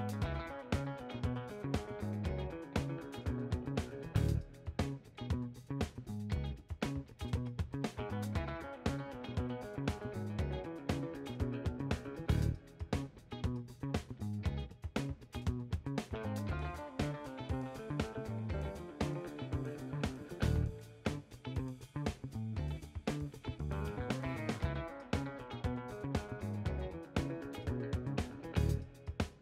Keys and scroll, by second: 5.4 b, 21.1 ctrl+z, 24.1 ctrl+z.